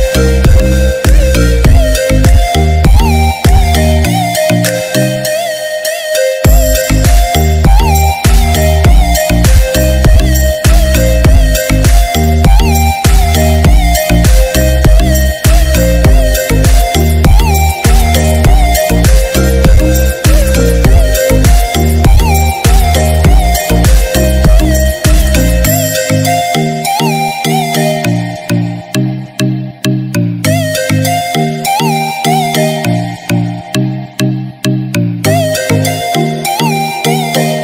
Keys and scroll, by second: 3.6 ctrl+-, 28.6 ctrl+-.